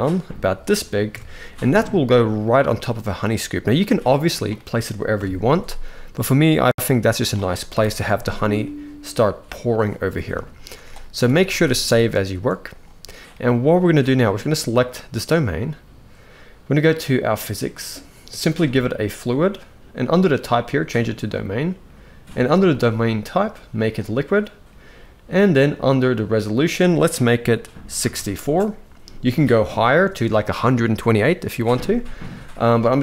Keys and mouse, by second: 0.8 KP_1, 1.7 g, 2.5 shift+middle click, 3.5 g, 4.9 KP_3, 5.6 g, 7.4 KP_1, 10.9 ctrl+s, 11.2 ctrl+s, 12.0 shift+middle click, 14.2 click, 17.0 click, 18.7-21.0 drag, 22.4-23.9 drag, 26.2-28.5 drag.